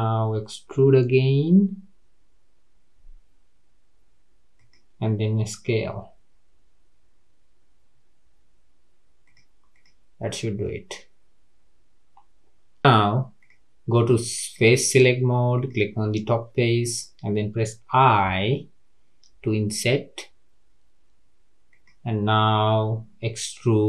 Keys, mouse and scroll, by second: 0.7 e, 5.9 s, 9.7 click, 10.6-13.4 middle drag, 13.4 click, 14.4 click, 15.5 click, 16.0 middle click, 16.9-17.4 scroll up 1, 23.6 e.